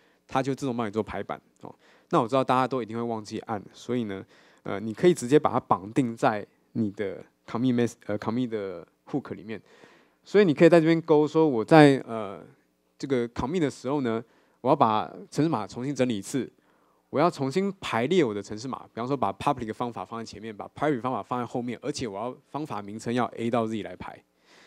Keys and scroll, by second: 4.7 super+k.